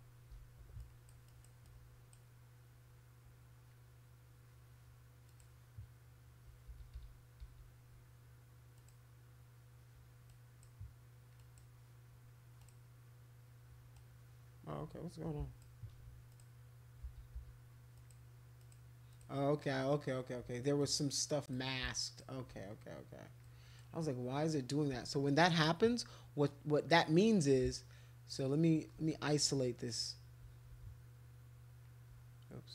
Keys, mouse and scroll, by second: 0.8 alt+click, 1.3 alt+click, 1.6 alt+click, 5.2 click, 6.6 ctrl+z, 6.9 ctrl+z, 7.4 ctrl+z, 8.7 click, 10.3 click, 11.4 click, 12.6 click, 13.9-15.6 drag, 16.3 ctrl+click, 17.0 ctrl+z, 17.3 ctrl+z, 17.9 ctrl+click, 18.6 ctrl+click, 19.1 ctrl+click, 20.8 click, 21.8 shift+click, 23.4 click, 28.3 ctrl+shift+click, 29.9 click, 30.7 ctrl+z.